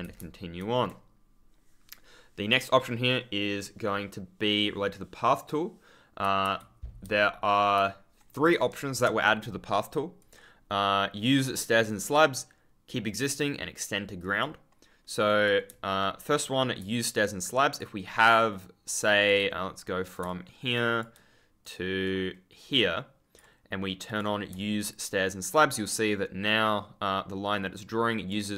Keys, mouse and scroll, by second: 6.1 s, 6.5 ctrl+a, 7.7 ctrl+w, 10.1 click, 14.1 click, 17.2 ctrl+click, 17.3-18.0 scroll up 1, 20.0 right click, 20.4-20.8 scroll up 1, 20.8-21.4 scroll down 1, 22.0 click, 25.0 ctrl+click, 25.2-25.7 scroll up 1, 26.0-26.4 scroll down 1, 27.6-28.0 scroll up 1, 28.0-28.5 scroll down 1.